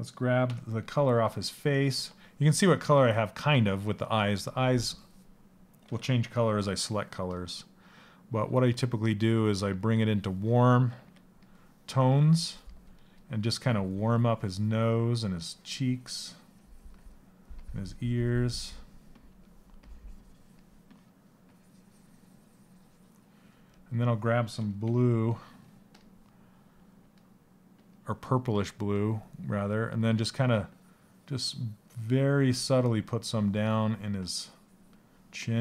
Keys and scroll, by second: 5.4 s, 24.4 c.